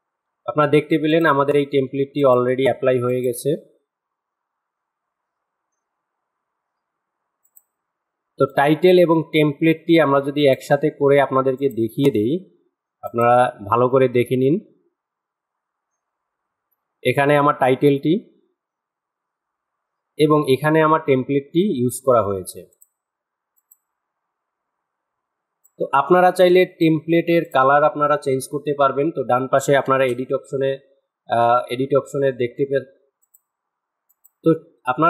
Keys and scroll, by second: 29.3 space.